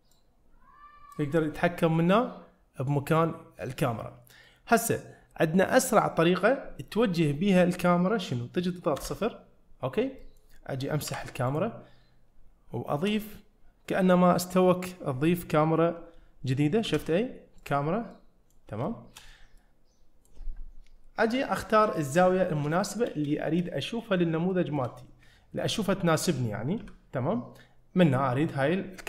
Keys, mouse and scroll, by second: 0.2-1.2 drag, 9.0 KP_0, 10.0 scroll down 1, 10.3 middle click, 10.8 scroll down 1, 11.1 x, 16.9 shift+a, 18.2 middle click, 18.9 shift+middle click, 19.6-20.3 middle drag, 21.6-22.0 middle drag, 22.3-22.8 scroll up 2, 22.8 shift+middle click, 23.4 shift+middle click, 23.8 middle click, 24.6 shift+middle click, 25.3 ctrl+middle click, 26.0 shift+middle click, 26.8 n, 27.6 middle click.